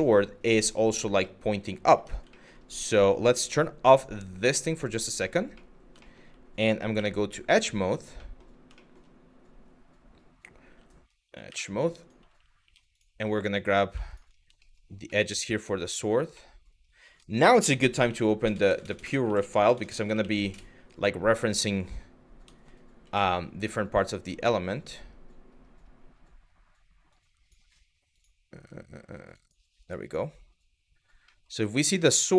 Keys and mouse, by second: 1.0 middle click, 1.6 Tab, 2.0 middle click, 2.5 Tab, 4.1 click, 4.7 middle click, 5.3 middle click, 5.7 shift+middle click, 6.6 2, 7.9 middle click, 8.4 shift+middle click, 10.3 1, 11.1 w, 12.2 2, 14.3 shift+middle click, 14.8 shift+middle click, 15.0 typing, 16.1 middle click.